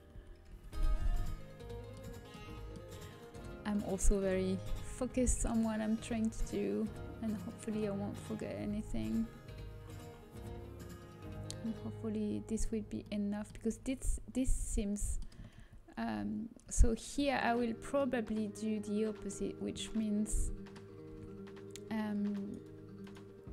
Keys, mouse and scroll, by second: 0.1 z, 0.4 z, 5.4 g, 8.2-9.8 drag, 8.9 g, 13.0 middle click, 14.0 a, 15.5 ctrl+z, 15.9 ctrl+z, 16.6 ctrl+z, 17.0 ctrl+z, 17.6 middle click, 21.0 Tab, 23.0-23.5 middle drag.